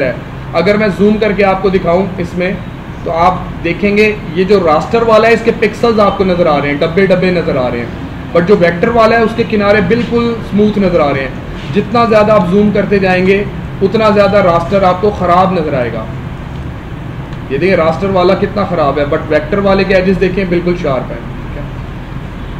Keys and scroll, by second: 0.3 ctrl+=, 2.9 ctrl+=, 5.6 ctrl+=, 10.6 ctrl+=, 12.4 space, 16.5 space.